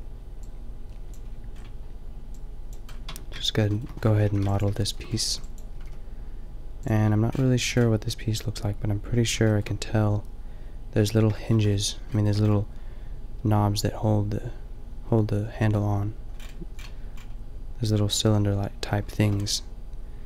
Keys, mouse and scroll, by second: 2.2 click, 2.9 click, 3.1 Tab, 4.3 a, 4.5 b, 5.3 b, 5.7 g, 9.5 middle click, 9.9-11.3 middle drag, 11.5 middle click, 12.3 middle click, 16.3-19.1 middle drag.